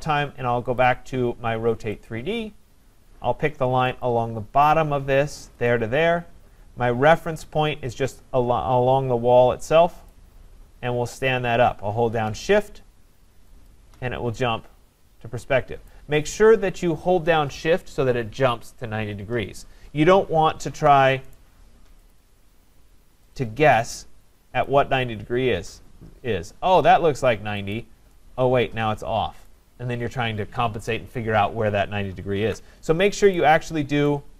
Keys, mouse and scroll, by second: 0.8 click, 2.1 click, 4.1 click, 5.7 click, 10.1 click, 13.7 shift+click, 15.9 right click, 20.7 ctrl+z, 21.3 right click, 22.1 click, 23.3 click, 24.6 click, 27.8 click, 29.4 right click, 32.5 ctrl+z, 33.4 right click.